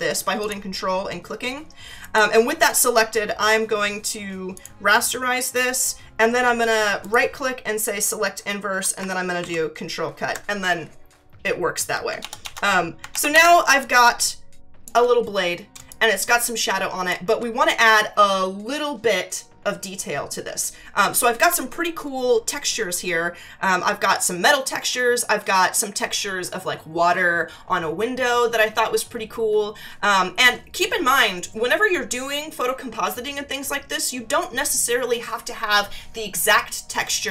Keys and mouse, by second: 0.4 ctrl+click, 2.0 right click, 4.6 click, 7.0 right click, 8.0 click, 9.4 ctrl+x, 13.1 ctrl+=, 13.7 space, 13.8 click, 14.9 space, 15.9 click, 17.1 space.